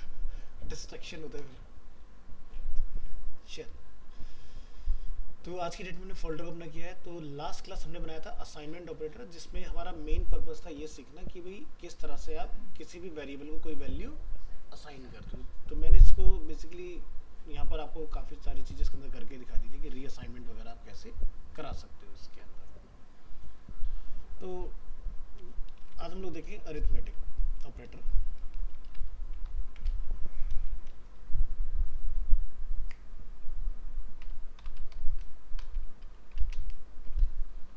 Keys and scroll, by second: 25.7 alt+f, 29.5 ctrl+shift+Left.